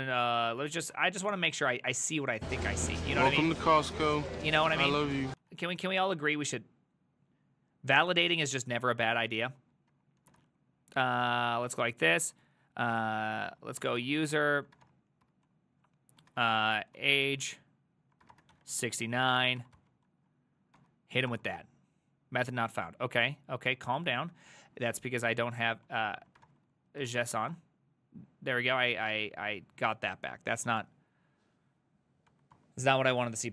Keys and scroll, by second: 4.7-6.0 typing, 9.2-19.8 typing, 20.8-24.1 typing, 24.2 ctrl+Right, 24.3 ctrl+Left, 24.5 ctrl+Left, 24.7 ctrl+Left, 24.9 ctrl+Left, 25.0 ctrl+Left, 25.7 Left, 26.4-27.8 typing, 32.3 Up, 32.6 Return.